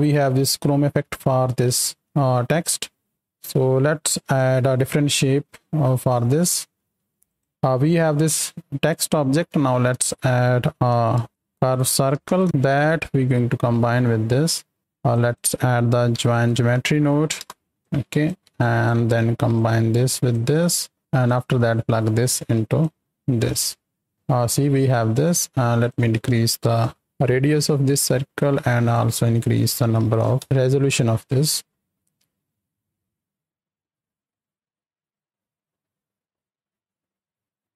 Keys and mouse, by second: 1.5 click, 3.4 click, 4.2 space, 5.9 click, 6.8 click, 8.8 click, 9.8 shift+a, 15.1 click, 17.8 click, 18.6 click, 19.6 click, 19.7-21.0 drag, 21.3-24.1 drag, 25.8-28.2 drag, 28.9-30.4 drag, 31.6 click, 32.3 space, 33.1 click.